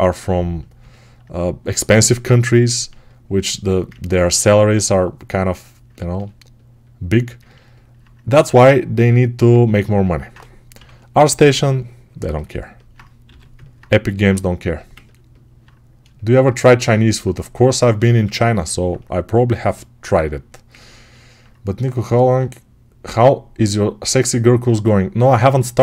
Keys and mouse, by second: 10.6 6, 13.1 g, 14.5-17.9 ctrl+alt+drag, 17.9-25.8 ctrl+alt+right drag.